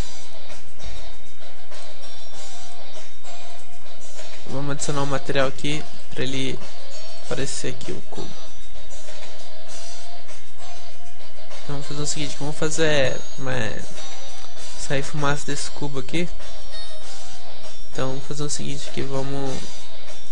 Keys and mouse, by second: 1.0 g, 2.6-10.2 drag, 3.5-7.4 right drag, 10.2-12.2 middle drag, 13.6 middle click, 13.8-20.3 middle drag.